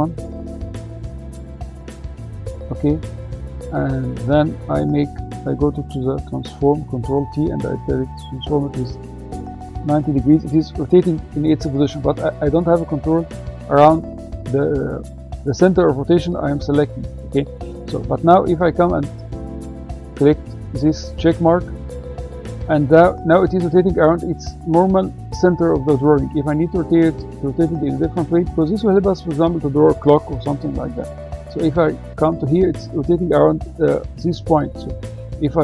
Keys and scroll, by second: 5.1 ctrl+t, 8.9 9.